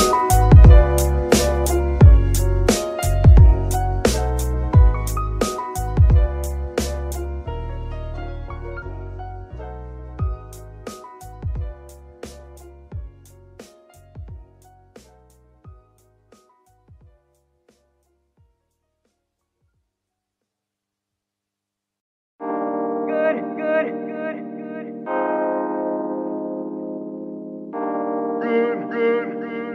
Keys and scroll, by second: 1.3 shift+s, 19.1 KP_Divide.